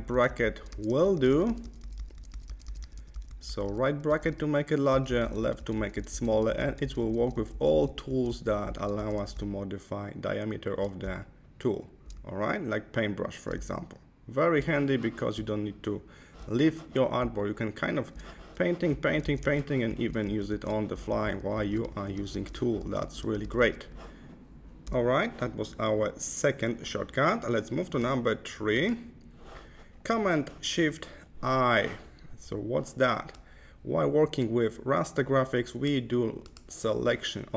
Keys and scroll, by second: 0.6 ], 4.8 [, 8.9 ], 10.9 [, 12.1 ], 13.6 [, 15.2 ], 17.1 [, 18.8 [, 21.8 ], 24.7 Left.